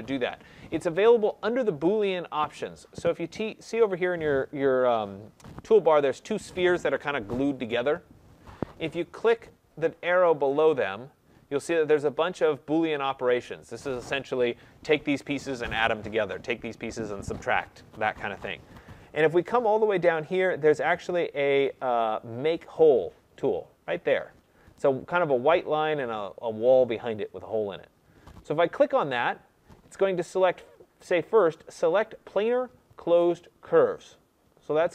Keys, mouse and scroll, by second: 10.6-15.6 drag, 28.7-33.7 drag.